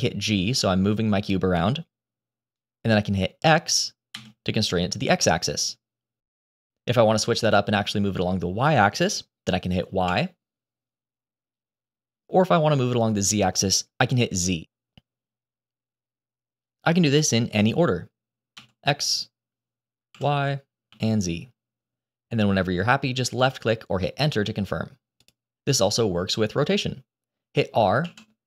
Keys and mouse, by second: 27.9 r.